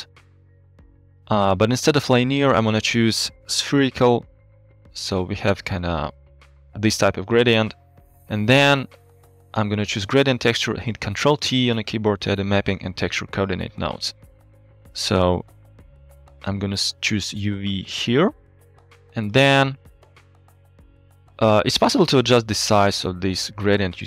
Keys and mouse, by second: 1.1 middle click, 2.5 click, 3.1-3.9 drag, 4.6 middle click, 8.1-8.4 middle drag, 9.5 click, 10.1 click, 11.0 ctrl+t, 11.7-12.1 drag, 13.0 drag, 14.7 g, 17.3-18.0 drag.